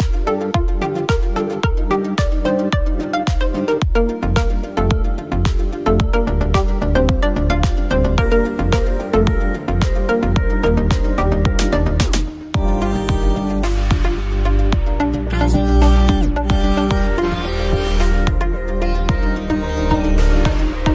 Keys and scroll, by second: 3.3 space, 15.5 ctrl+t.